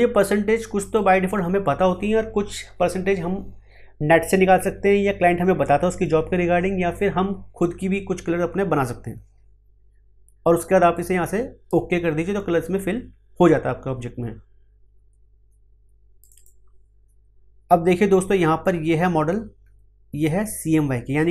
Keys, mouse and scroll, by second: 0.9-10.9 drag, 10.9-16.2 drag.